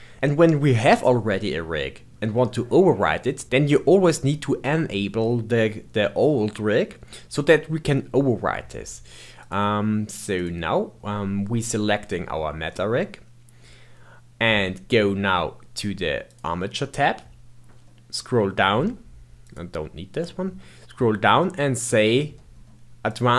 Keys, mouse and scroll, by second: 3.4 click, 4.6 click, 9.4 click, 10.3 click, 16.3 click, 17.5-19.4 scroll down 10, 19.4-20.1 drag, 20.1-22.0 scroll down 3, 22.0-23.1 scroll down 4, 23.1 click.